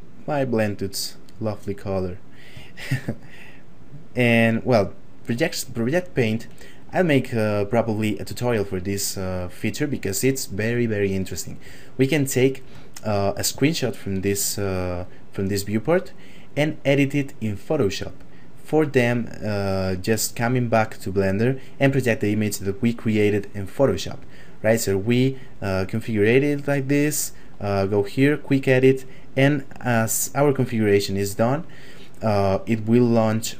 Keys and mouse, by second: 2.7 shift+middle click, 3.7 click, 12.0 shift+middle click, 13.2 middle click, 13.7 shift+middle click.